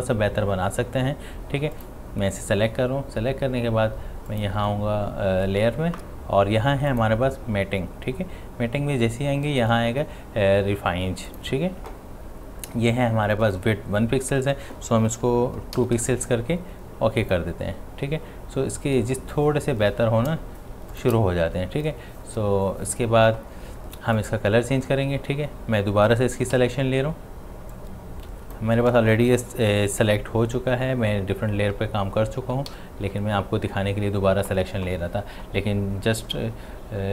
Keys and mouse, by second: 1.7 click, 6.9 click, 6.9 click, 11.3 click, 17.2 click, 20.7 click, 20.7 ctrl+space, 20.9 ctrl+alt+click, 24.2 click, 27.7-32.2 drag, 32.5 click, 32.7 ctrl+d.